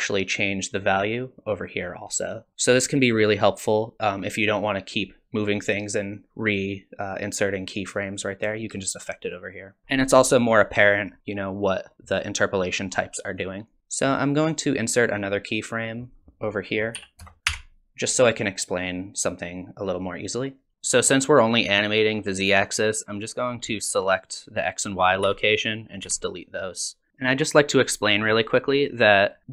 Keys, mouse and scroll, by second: 9.8 ctrl+z, 9.8 middle click, 9.8-10.1 scroll down 3, 10.7 click, 11.6 click, 13.4 click, 16.1 click, 17.5 i, 18.8 click, 23.4 click, 25.2 x, 25.7 click, 26.0 x, 27.1 a, 28.4 click, 29.0 click.